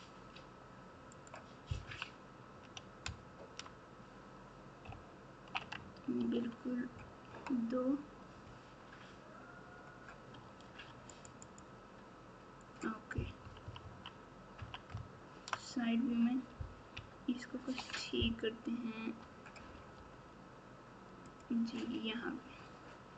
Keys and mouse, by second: 1.8 KP_1, 3.0 KP_Add, 3.5 KP_Add, 4.8 ctrl+KP_2, 5.3 ctrl+KP_2, 6.1 ctrl+r, 13.4 KP_6, 13.6 KP_6, 14.5 KP_3, 14.9 KP_Add, 15.4 KP_Add, 16.4 KP_Add, 16.9 ctrl+KP_2, 17.4 ctrl+KP_2, 19.9 g.